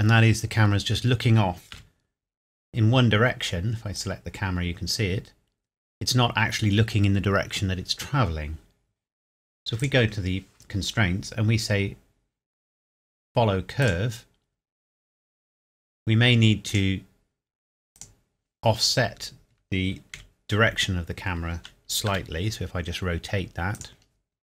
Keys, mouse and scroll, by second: 1.7 KP_0, 1.8 KP_7, 2.6 scroll up 1, 4.0 click, 9.8 click, 12.5-13.8 scroll down 2, 13.8-16.1 drag, 16.7 click, 18.7 scroll up 1, 20.3 KP_Decimal, 21.0 scroll down 1, 22.1 r, 23.7 click.